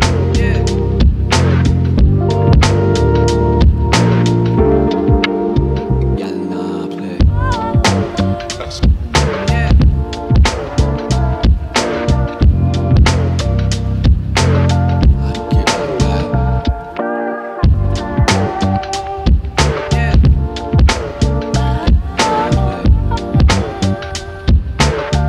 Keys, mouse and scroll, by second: 0.4 click, 0.6 g, 2.2 click, 2.5 g, 3.3 g, 4.8 click, 5.1 g, 7.0 click, 7.2 g, 11.4 click, 11.8 g, 12.5 click, 12.7 g, 13.8 g, 15.2 click, 15.5 g, 17.2 click, 17.8 g, 19.6 click, 20.1-22.0 shift+middle drag, 22.0 click, 22.4 g, 23.5 click, 24.6 click, 24.8 g.